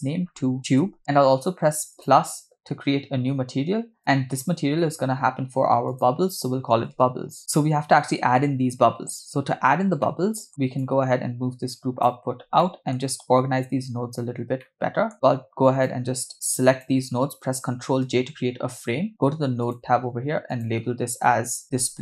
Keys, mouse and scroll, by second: 1.0 BackSpace, 1.9 click, 4.0-4.4 drag, 5.9-7.4 drag, 7.4 scroll down 3, 10.0 middle click, 10.8-12.0 drag, 12.3 scroll down 2, 12.6 middle click, 14.2 scroll up 3, 14.6 middle click, 15.8-16.9 drag, 18.3 ctrl+j, 19.6 click, 20.5-22.0 drag.